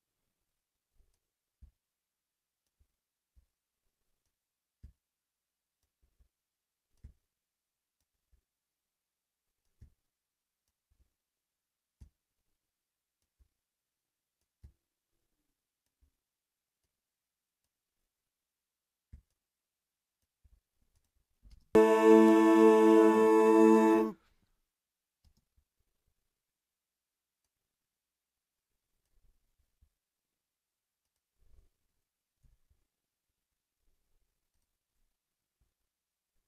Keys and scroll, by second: 21.5 super+space, 22.5 space, 25.2 space, 32.4 a, 35.6 a.